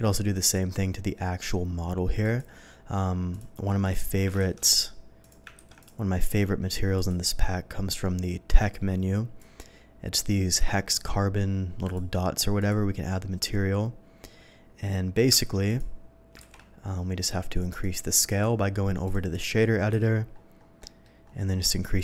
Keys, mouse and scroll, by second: 0.3 click, 2.2 click, 3.2 click, 3.8 click, 4.6 ctrl+shift+z, 5.1 click, 5.5 ctrl+a, 5.7 click, 6.1 click, 6.9 click, 8.5 click, 9.3 click, 11.8 click, 12.5 click, 15.3 ctrl+a, 15.6 click, 16.4 ctrl+z, 17.2 click, 18.2 click, 19.0 click, 20.0 scroll up 1, 20.0 n, 20.8 middle click, 21.2 scroll up 1, 21.9 click.